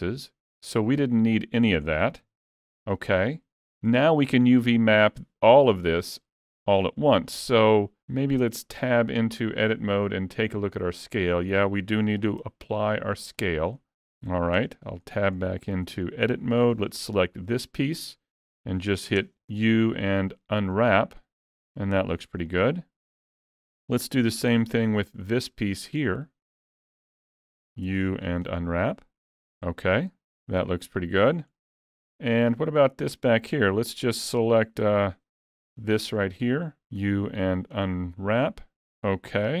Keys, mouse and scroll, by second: 0.1 middle click, 2.2 alt+a, 2.6-4.4 scroll down 3, 2.9 middle click, 4.4 alt+a, 4.7 middle click, 5.5 middle click, 7.3 middle click, 8.4 Tab, 12.4 ctrl+a, 15.1 middle click, 15.8 alt+a, 16.1 middle click, 16.3-17.3 scroll up 1, 17.3 l, 22.5 middle click, 23.5 alt+a, 24.8 l, 25.3 middle click, 27.4 middle click, 27.9 u, 31.3 scroll down 1, 31.6 middle click, 34.9 alt+a, 35.7 l, 36.2 middle click, 39.5 alt+a.